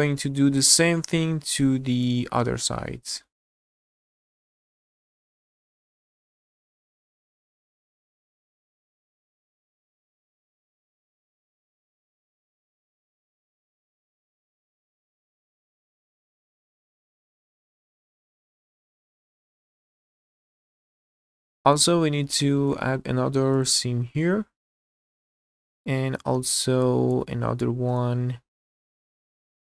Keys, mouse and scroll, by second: 1.1-1.4 scroll down 1, 1.6 shift+middle click, 2.2 middle click, 3.1 scroll up 1, 3.3 shift+middle click, 3.6 alt+click, 3.9 shift+middle click, 4.2 ctrl+click, 4.5 ctrl+alt+click, 5.1 ctrl+click, 5.5 q, 6.4 alt+click, 6.6 ctrl+click, 7.0 ctrl+alt+click, 7.2 ctrl+alt+click, 7.9 ctrl+click, 8.3 q, 8.7 scroll down 1, 8.8 shift+middle click, 8.9 middle click, 9.3 scroll up 2, 9.4 shift+middle click, 9.8 alt+click, 10.0 middle click, 10.3 ctrl+click, 10.6 ctrl+alt+click, 10.8 ctrl+click, 11.6 ctrl+click, 12.0 q, 12.6 alt+click, 12.9 ctrl+click, 13.2 ctrl+alt+click, 13.7 ctrl+click, 14.3 q, 14.7 middle click, 15.0 shift+middle click, 15.3 middle click, 15.7 alt+click, 15.9 ctrl+click, 16.1 ctrl+alt+click, 16.5 ctrl+alt+click, 16.7 ctrl+click, 17.2 ctrl+click, 17.5 q, 17.9 middle click, 18.3 alt+click, 18.5 ctrl+click, 18.8 ctrl+alt+click, 19.0 ctrl+alt+click, 19.5 q, 19.9 middle click, 20.4 scroll down 1, 20.5 shift+middle click, 20.8 middle click, 21.2 middle click, 22.4 shift+middle click, 22.8-23.1 scroll up 1, 23.5 alt+click, 24.4 q, 25.4 scroll up 1, 25.8 shift+middle click, 26.9 scroll up 3, 27.2 shift+middle click, 28.7 click, 29.0 scroll down 2.